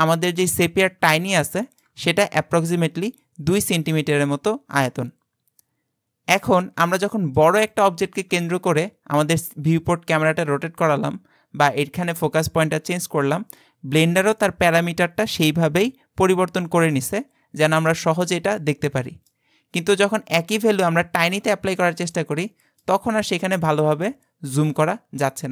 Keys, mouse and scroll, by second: 0.3 click, 1.3 shift+middle click, 2.1-4.1 scroll up 4, 6.7-7.1 scroll down 4, 7.1 shift+middle click, 7.7 click, 8.6 KP_Decimal, 9.5-12.6 middle drag, 20.6 click, 21.4-23.1 middle drag, 23.1-24.1 scroll up 8, 24.1 shift+middle click, 24.7-25.5 scroll up 43.